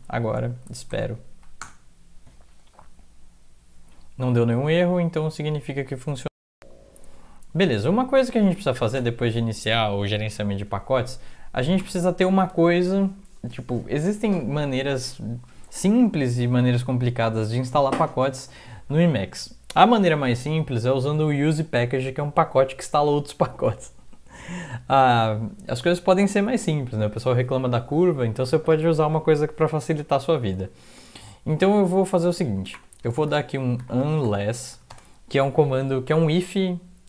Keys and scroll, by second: 0.9 ctrl+l, 1.3 Up, 4.9 Down, 5.4 Down, 5.5-6.3 Down, 6.5 Down, 6.5 Up, 7.0-7.5 Up, 7.5 Down, 7.8 Down, 8.1 Down, 9.0 BackSpace, 9.8 Up, 10.0 Up, 10.3 Up, 10.7 Down, 10.9 Down, 11.0 Down, 11.2 Down, 11.8 Return, 32.7-35.2 typing, 33.4 Left.